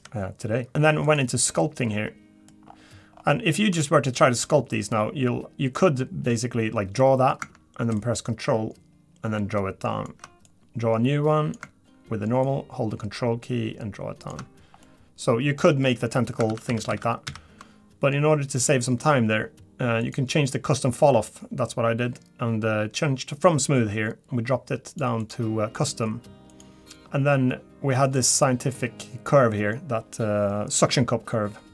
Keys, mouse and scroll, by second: 0.7 shift+middle click.